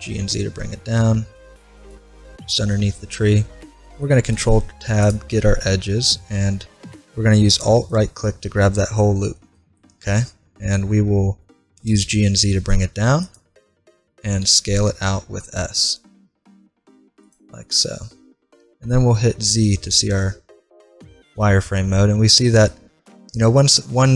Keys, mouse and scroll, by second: 4.1 ctrl+Tab, 7.5-9.3 right drag, 9.5-11.3 middle drag, 11.9 g, 14.4 s, 17.7 middle click, 19.0 z, 23.1-24.1 middle drag.